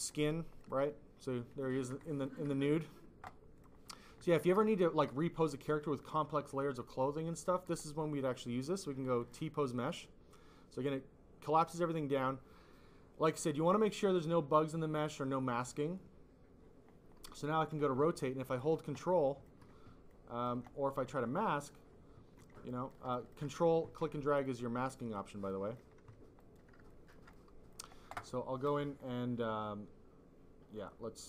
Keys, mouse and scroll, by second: 0.5 click, 1.6 click, 2.4 click, 3.5 click, 4.5 alt+click, 7.2 click, 9.1 click, 10.1 click, 15.5 click, 17.5 click, 17.9 click, 18.5 ctrl+click, 19.0 click, 20.0 ctrl+click, 22.6 click, 23.2 alt+click, 24.4 ctrl+click, 25.4 click, 26.3 click, 26.9 alt+click, 27.2 click.